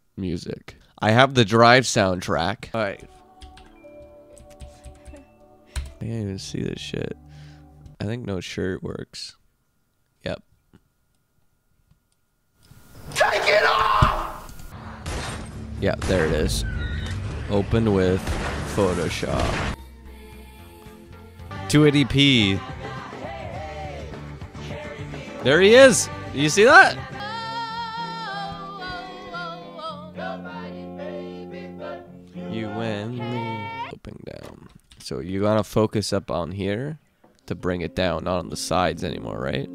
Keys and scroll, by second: 4.5 Down, 4.7 Down, 5.1 Down, 5.8 Return, 19.7 super+v, 33.9 super+v, 35.2 super+v.